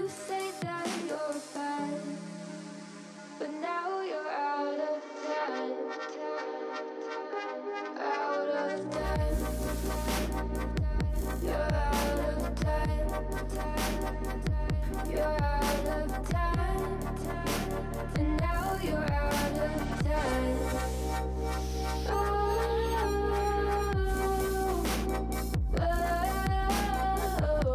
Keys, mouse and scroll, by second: 0.5 ctrl+l, 1.3 s, 3.0 alt+z, 3.6 s, 6.5 click, 7.4-8.5 drag, 8.7 scroll down 3, 8.9 middle click, 9.2 Tab, 9.3 click, 9.5-10.0 shift+middle drag, 10.0 scroll up 4, 10.8 scroll down 1, 11.0-13.6 middle drag, 13.6 click, 14.0 middle click, 14.3 scroll down 3, 14.5 drag, 14.6 middle click, 14.9 click, 15.2 Tab, 15.5-17.5 shift+middle drag, 17.8 ctrl+z, 18.5 Tab, 19.2 shift+a, 20.5 KP_1, 20.9 alt+z, 21.1 shift+middle drag, 21.3 scroll up 4, 21.6 g, 22.5 s, 23.1 shift+middle click, 23.3 scroll up 6, 23.5 shift+middle click, 23.9 s, 26.8 shift+middle click, 27.1-27.7 scroll up 2.